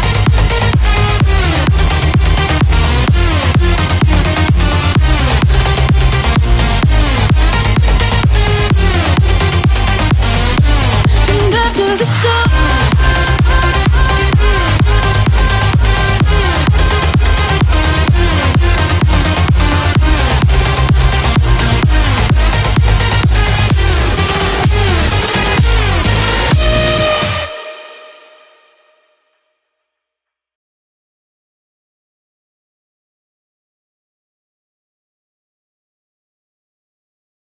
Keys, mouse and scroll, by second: 1.2 space, 1.6 click, 1.9 scroll up 1, 2.5 click, 3.5 scroll down 1, 4.2 shift+middle click, 5.3 scroll up 1, 6.5 ctrl+click, 7.3 right click, 8.1 click, 9.1 scroll up 1, 9.5 click, 9.9 scroll down 1, 10.5 scroll up 1, 11.2 ctrl+click, 11.7 scroll down 1, 12.5 shift+middle click, 12.9 scroll up 1, 13.8 ctrl+click, 14.2 ctrl+right click, 15.4 ctrl+click, 15.7-16.4 ctrl+scroll down 2, 16.4 ctrl+click, 17.7 right click, 18.5 click, 18.9-19.6 scroll down 2, 19.6 click, 19.9 scroll up 1, 21.0 b, 22.4 click, 23.1 space, 24.1-29.3 drag, 29.3 space, 29.7 scroll down 1, 30.6 click, 31.0-31.3 scroll up 1, 32.5 click.